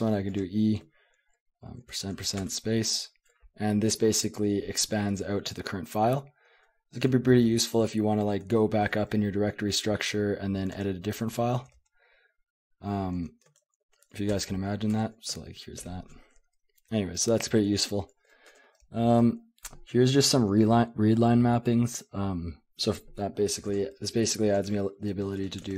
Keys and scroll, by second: 1.6-2.5 typing, 7.0 ctrl+w, 8.2 ctrl+w, 8.4 ctrl+w, 10.7 Tab, 11.2 Tab, 11.6 Tab, 11.7 Tab, 13.6 shift+Tab, 13.8 shift+Tab, 14.3 Return, 14.9 Return, 15.8 ctrl+o, 17.6-20.2 typing, 18.5 Return, 23.7-25.7 typing, 25.5 Escape.